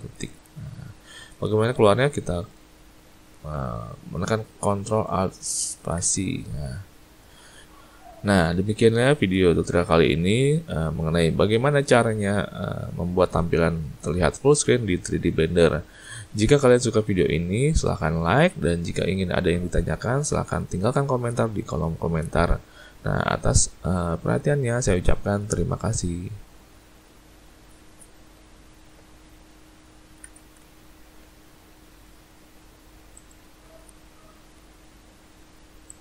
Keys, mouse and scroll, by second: 0.0 ctrl+`, 5.9 ctrl+alt+space, 15.3 z, 17.2 shift+middle click, 18.1-20.5 ctrl+scroll up 3, 20.9 click, 23.8 shift+middle click, 25.1 shift+middle click, 32.3 ctrl+alt+space.